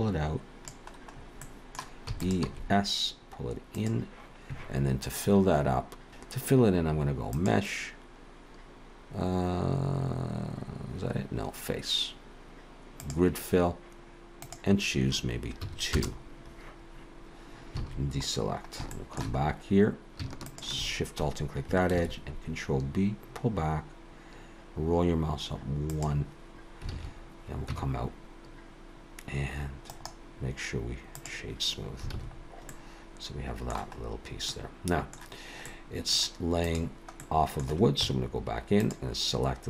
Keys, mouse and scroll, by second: 1.2-1.6 scroll up 2, 1.4 middle click, 2.1 e, 2.5 s, 5.7 ctrl+t, 5.7 ctrl+j, 6.9 ctrl+j, 7.4 click, 14.4 click, 17.8 alt+a, 18.5 scroll up 2, 18.9 shift+middle click, 19.4-20.2 scroll up 2, 20.5 alt+shift+click, 22.1 ctrl+b, 26.9 alt+a, 27.7 Tab, 29.9 right click, 32.1 alt+a, 32.3-32.7 scroll down 4, 32.7 middle click, 34.0-34.5 scroll up 2, 34.5 middle click, 35.6 middle click, 36.7 click, 37.2 middle click, 38.0 Tab, 38.7 click.